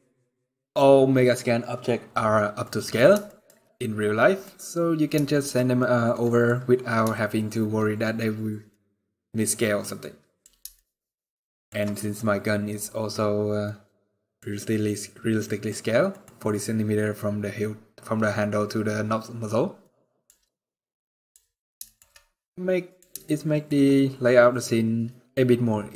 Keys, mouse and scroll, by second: 2.3 middle click, 3.0 shift+middle click, 3.5 middle click, 4.9 shift+middle click, 5.2 scroll up 2, 5.5-5.8 scroll down 1, 5.8 middle click, 6.8 shift+middle click, 8.4 middle click, 9.7 middle click, 10.5 shift+middle click, 11.2 middle click, 11.7 middle click, 11.9 scroll up 2, 12.5 middle click, 12.9-13.4 scroll down 1, 13.4 middle click, 14.3 scroll up 2, 14.9 scroll down 2, 15.1 middle click, 15.8 middle click, 19.5 middle click, 20.2 scroll down 2, 20.8 middle click, 21.6 shift+middle click, 21.8 middle click, 22.9 shift+middle click, 23.9 middle click, 24.9 scroll down 1, 25.5-25.9 scroll down 1.